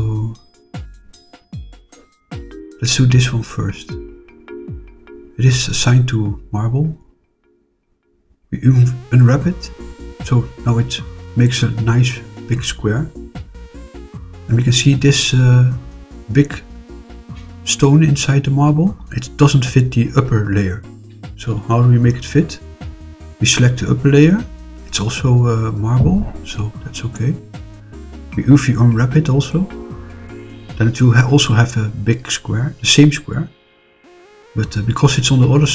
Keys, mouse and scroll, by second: 0.5 middle click, 0.9 click, 1.3 middle click, 2.7 click, 5.2 click, 7.8 click, 8.6 click, 9.5 click, 10.3 scroll down 2, 13.3 click, 13.9-14.4 middle drag, 16.9-17.8 middle drag, 18.3 click, 21.0 click, 21.6 click, 22.9 click, 28.7 click, 29.5 click, 30.3-32.9 middle drag.